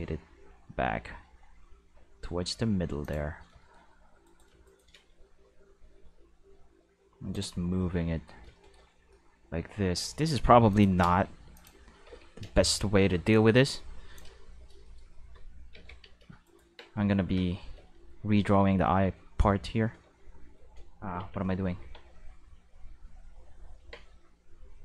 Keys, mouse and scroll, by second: 3.0 click, 4.2 right click, 4.6 shift+right click, 4.9 g, 6.4 middle click, 7.3 click, 7.8 shift+middle drag, 10.1 shift+middle drag, 10.7 click, 11.0-13.0 typing, 11.5 click, 13.3-14.1 drag, 15.7 alt+a, 16.0 c, 16.5 right click, 16.6 Tab, 17.2 alt+a, 17.6 c, 18.7 q, 20.0 q, 21.1 Escape, 21.8 Tab, 22.0 middle click, 22.5 q.